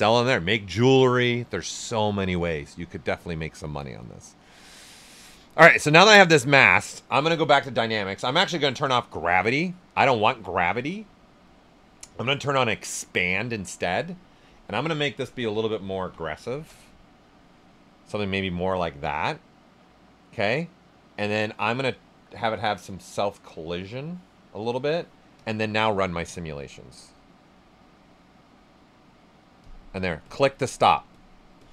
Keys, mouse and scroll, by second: 4.6 alt+right click, 8.6 click, 12.6 click, 16.6 Return, 24.6 click, 30.6 click.